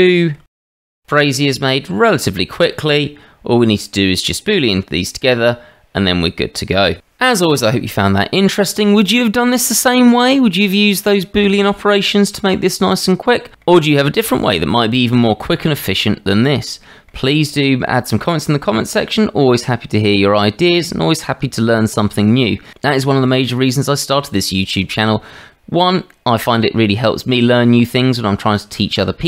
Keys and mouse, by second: 0.1 shift+middle drag, 0.5-1.2 middle drag, 1.4-1.7 shift+middle drag, 2.7-4.2 middle drag, 4.4-7.0 middle drag, 9.4-12.5 middle drag, 13.5 middle click, 16.5-17.1 middle drag, 17.5-17.8 shift+middle drag, 18.6-22.4 middle drag, 26.1-28.5 middle drag.